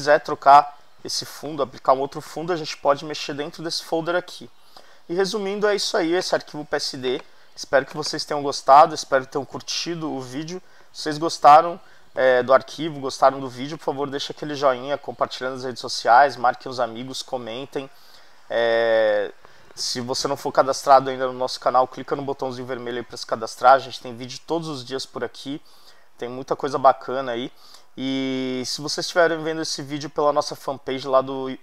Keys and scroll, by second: 10.4 super+=.